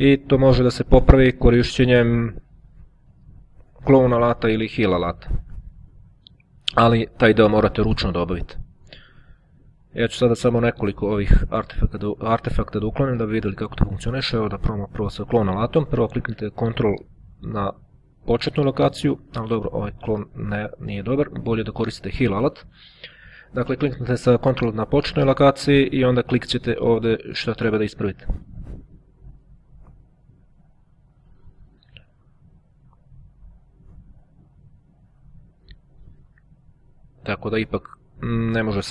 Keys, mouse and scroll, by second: 0.0-1.3 ctrl+scroll down 1, 1.3-1.7 ctrl+scroll down 1, 3.3-3.8 ctrl+scroll up 1, 6.0-7.1 ctrl+scroll down 1, 7.1-8.6 ctrl+scroll down 1, 8.9-9.3 ctrl+scroll up 2, 9.5 ctrl+click, 10.3-10.9 ctrl+scroll up 2, 15.4-17.5 drag, 18.4 ctrl+click, 19.3 click, 20.7 ctrl+z, 22.6 click, 23.7 ctrl+click, 24.9 click, 25.9 click, 27.5-28.5 drag, 28.9-29.5 scroll down 1, 29.5-30.1 ctrl+scroll up 1, 30.1-30.5 ctrl+scroll down 1, 30.5-31.9 scroll up 1, 32.0-34.3 ctrl+drag, 35.7-36.6 ctrl+scroll down 2, 36.6-37.7 drag, 37.7-38.9 ctrl+scroll up 1.